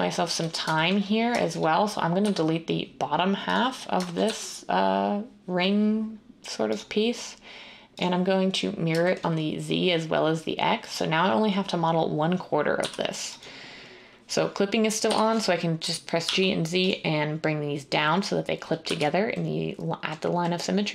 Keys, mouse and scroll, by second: 2.2 x, 4.2 z, 12.7 z, 15.0 g, 16.2 z, 18.8 z.